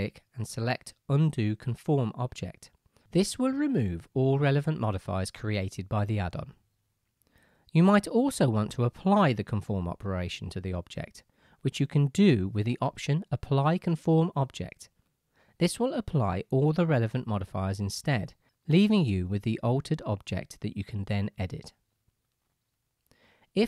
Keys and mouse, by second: 10.1-15.3 middle drag, 15.3-19.0 right drag, 19.0-23.4 drag, 21.9 Tab.